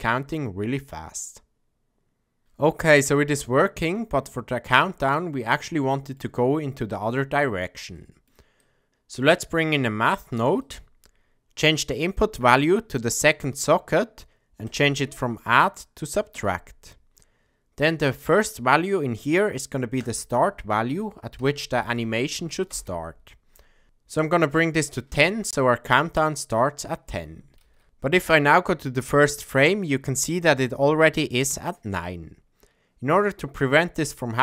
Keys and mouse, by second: 0.1-0.6 middle drag, 5.6 ctrl+middle click, 8.0 middle click, 8.6 click, 8.9 shift+a, 12.1-13.2 drag, 14.7-16.4 drag, 20.0-23.6 drag.